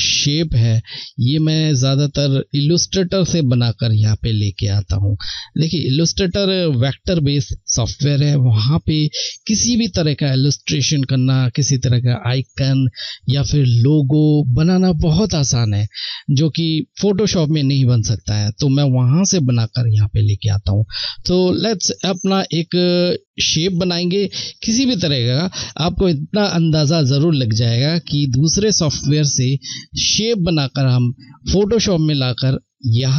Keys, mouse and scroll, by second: 23.5 click.